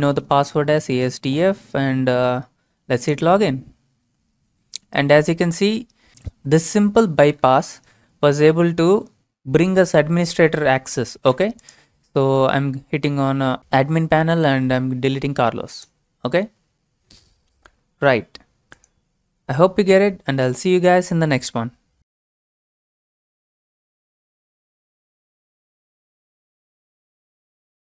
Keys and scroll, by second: 0.0-0.9 typing.